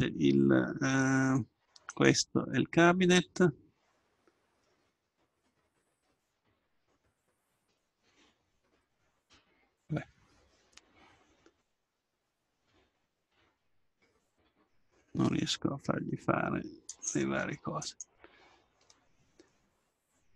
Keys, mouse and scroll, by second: 1.9-3.8 right drag, 6.2-8.3 drag, 8.8-10.7 middle drag, 12.8-14.2 middle drag, 14.2-16.2 right drag, 16.9-18.9 drag, 18.9 middle click, 19.4 middle click.